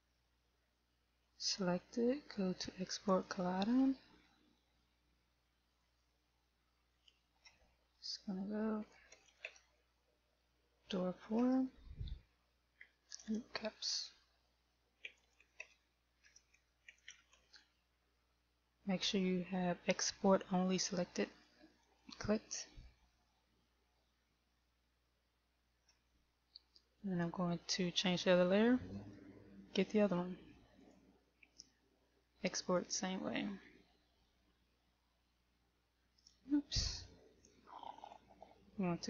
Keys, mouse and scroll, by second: 1.2 click, 25.6 click, 28.6 click, 29.6 right click, 31.4 click, 37.5 click, 38.7 click.